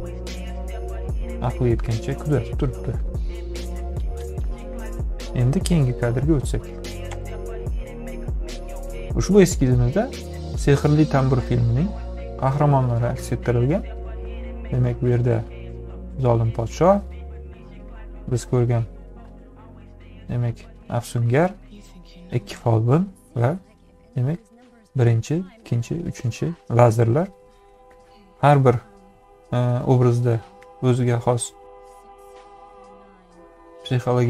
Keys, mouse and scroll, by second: 7.2 ..